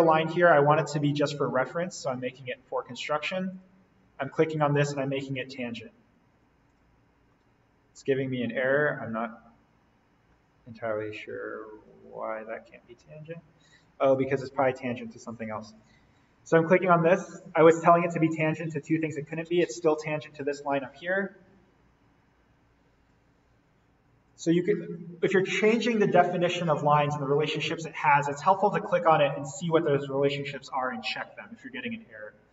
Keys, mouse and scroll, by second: 2.2 click, 7.1-7.7 scroll up 1, 9.0-9.5 scroll down 1, 9.8-11.0 scroll up 1, 11.0-11.3 scroll down 1, 11.7-12.1 scroll down 1, 13.0 ctrl+z, 14.1 click, 16.5-17.1 scroll down 1, 20.2 click, 22.4 click, 23.1 Delete, 24.2 click.